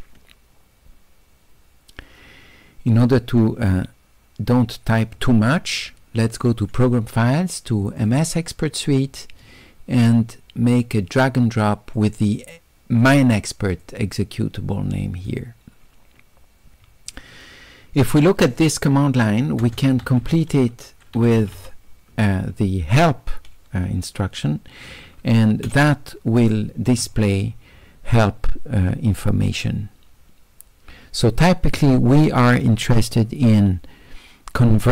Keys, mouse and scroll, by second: 3.7 click, 6.7 click, 8.0 click, 8.2 click, 9.1-11.2 middle drag, 9.1-11.2 scroll down 2, 12.0 click, 13.9-15.3 drag, 17.1 click, 19.7 space, 21.3 e, 27.5-29.0 middle drag, 29.0 click, 29.7-34.9 middle drag.